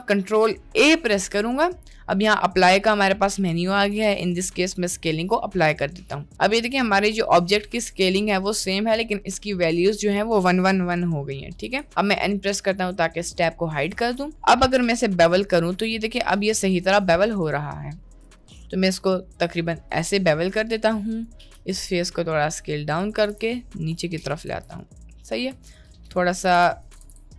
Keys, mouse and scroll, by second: 0.8 ctrl+a, 11.6 n, 13.9 Tab, 14.9 ctrl+b, 17.5 click, 18.4 ctrl+b, 20.1 Tab, 20.7 Tab, 20.9 click, 21.6 s, 23.1 g, 24.7 Tab, 25.9 Tab, 26.5 g, 27.0 g.